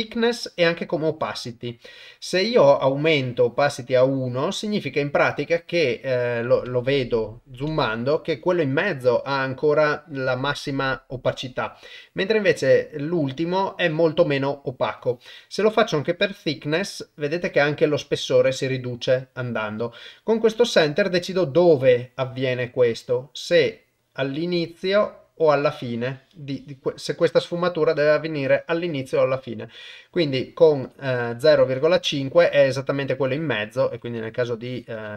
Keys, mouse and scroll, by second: 3.0-4.4 drag, 6.8 ctrl+middle click, 7.8 shift+middle click, 15.9-17.2 drag, 21.2-30.3 drag, 30.9-32.1 drag, 33.9-35.1 drag.